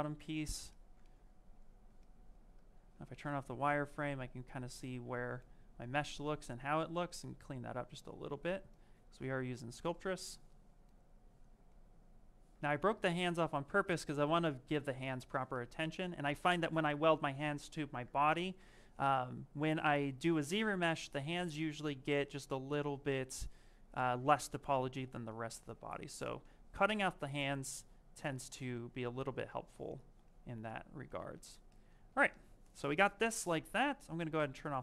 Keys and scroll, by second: 2.6 shift+f.